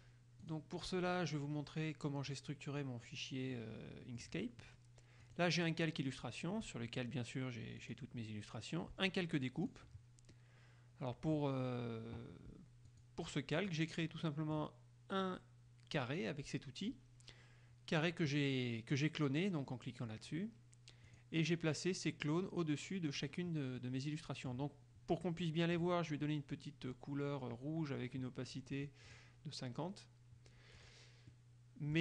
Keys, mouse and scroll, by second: 0.5 click, 2.4 click, 3.7 middle click, 4.5-5.3 scroll up 1, 5.3 click, 5.7-7.1 scroll up 1, 7.1 click, 8.0 click, 9.8 click, 10.5-11.7 middle drag, 13.1 click, 13.7 click, 14.3 middle click, 21.2 click, 23.9 middle click, 25.5 middle click, 29.3 click, 30.9 click, 31.5 middle click.